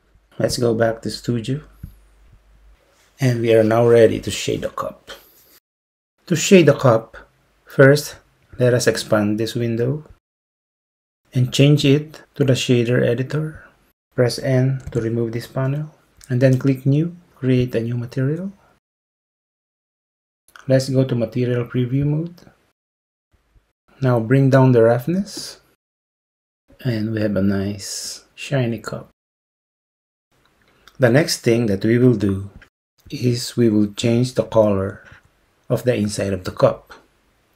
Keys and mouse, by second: 0.7-2.5 drag, 10.3 click, 12.2-13.6 drag, 14.9 n, 17.7 click, 20.3 z, 25.4 click.